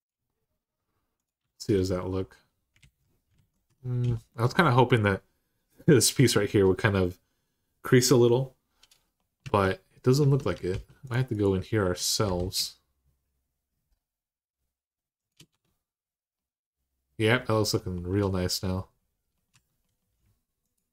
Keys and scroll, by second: 1.2 Tab, 2.6 alt+z, 3.1 alt+z, 3.4 Tab, 9.2 Tab, 10.0 Tab, 10.5 ctrl+r, 12.0 ctrl+b, 15.3 Tab, 19.3 Tab.